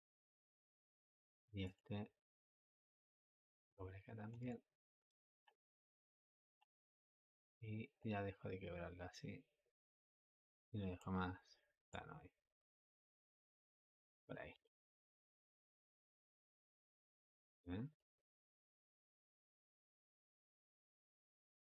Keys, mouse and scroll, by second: 7.8 click, 11.8-14.4 drag, 14.4 space, 17.8 click.